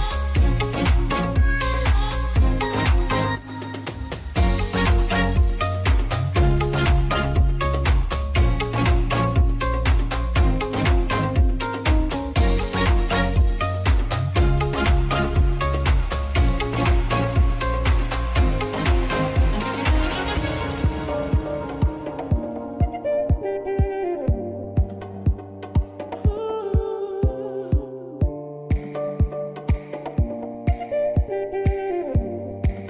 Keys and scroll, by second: 10.5 ctrl+space.